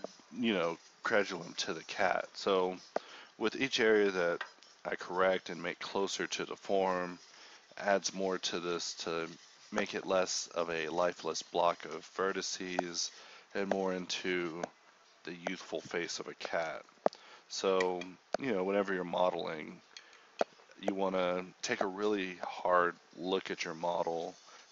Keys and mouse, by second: 0.3 g, 0.9 g, 1.8 alt+s, 2.4 alt+s, 3.5 a, 4.0 k, 8.4 KP_4, 8.8 KP_1, 9.3 click, 9.6 g, 10.2 click, 10.5 alt+m, 11.0-17.0 typing, 18.3 g, 18.6 g, 19.4 g, 20.0 g, 20.4 Tab, 20.8 Tab, 21.4 g, 21.9 g, 22.7 g, 23.8 g.